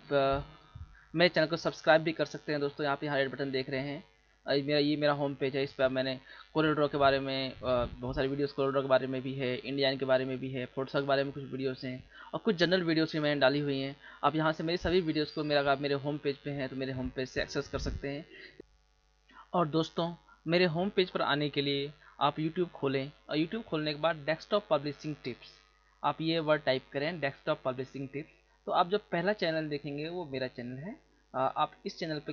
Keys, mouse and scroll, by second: 21.8 click, 25.2 click, 25.5 click.